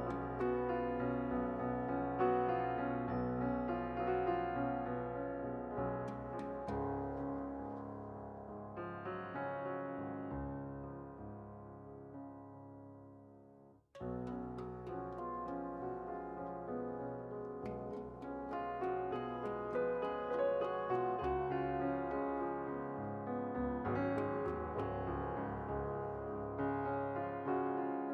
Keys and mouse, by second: 0.5-1.9 drag, 2.3 click, 2.9 middle click, 3.1 click, 3.1-4.8 middle drag, 6.6 KP_7, 8.6-9.6 drag, 8.9 shift+a, 10.1 s, 11.5 click, 12.3 p, 13.0 Tab, 13.1-14.4 drag, 16.9 Tab, 17.8-18.8 drag, 18.8 Tab, 18.9-22.3 right drag, 19.3 Tab, 20.9-22.3 drag, 24.2-25.4 right drag, 27.7 right click.